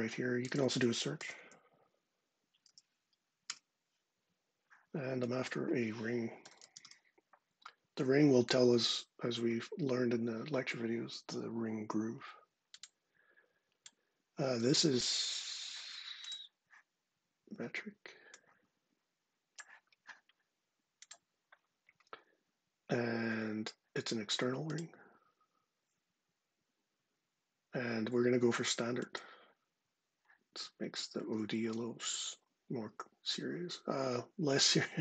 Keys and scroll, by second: 0.7-2.5 typing, 3.3 Return, 6.0-7.1 typing.